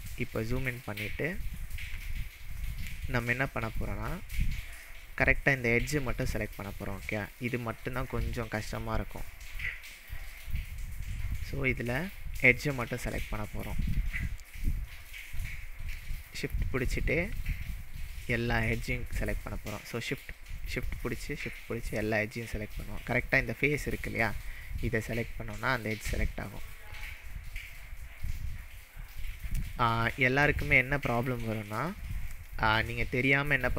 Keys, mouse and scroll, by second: 0.4-0.9 shift+middle drag, 4.1-4.8 scroll down 4, 4.8-6.2 scroll up 3, 8.1-8.4 scroll up 1, 9.0 click, 10.7 click, 11.7 click, 13.1-13.9 shift+middle drag, 14.1 click, 15.1 alt+click, 15.2 alt+middle click, 16.2 shift+click, 17.5-18.0 shift+middle drag, 18.8 shift+click, 19.4-19.9 shift+middle drag, 20.9 shift+click, 21.4-22.2 shift+middle drag, 24.6 shift+click, 25.2-25.7 shift+middle drag, 26.5 shift+click, 27.7-28.5 shift+middle drag, 29.7 click, 30.2 shift+scroll up 1, 30.4-30.9 shift+middle drag.